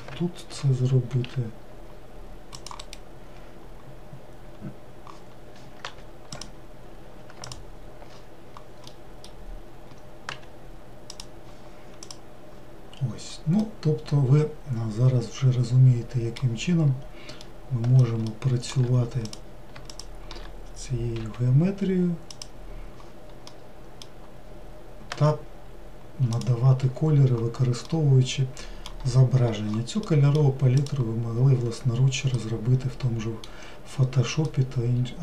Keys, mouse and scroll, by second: 1.2 ctrl+r, 6.0 3, 6.5 click, 10.5 g, 12.2 click, 13.1-13.7 scroll down 1, 13.7-17.1 middle drag, 17.1-17.5 scroll up 1, 17.5-19.4 middle drag, 19.4 click, 21.3 e, 25.2 g, 30.2-31.0 middle drag, 31.0 click, 31.7-32.4 scroll down 2, 32.5-35.2 middle drag.